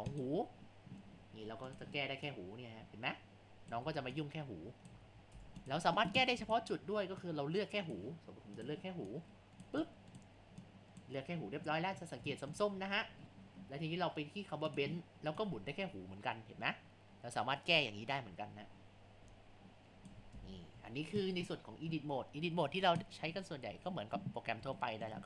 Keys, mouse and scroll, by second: 0.1 click, 1.7 click, 3.9 ctrl+z, 4.2 click, 5.1 ctrl+z, 5.4 Tab, 6.5 click, 7.3 click, 8.6 click, 9.9 click, 10.7 click, 11.9 click, 12.0 scroll up 1, 12.4 middle click, 12.8-13.2 scroll down 3, 14.7 click, 20.4 ctrl+z, 23.5 scroll down 2, 24.4 scroll up 1, 24.8-25.2 shift+middle drag.